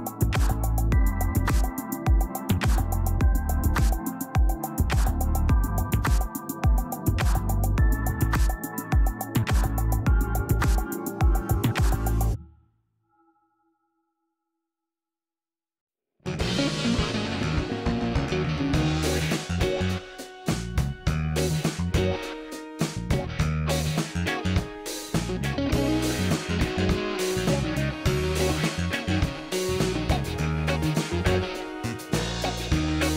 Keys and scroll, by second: 0.9 ctrl+alt+d, 7.8 ctrl+l, 14.5 ctrl+d, 15.2 ctrl+space, 15.5 ctrl+space, 16.3 space, 18.5 ctrl+alt+z, 19.9 ctrl+alt+z, 20.5 ctrl+alt+d, 24.6 ctrl+l, 27.8 ctrl+d, 28.0 space, 28.7 space, 29.0 space.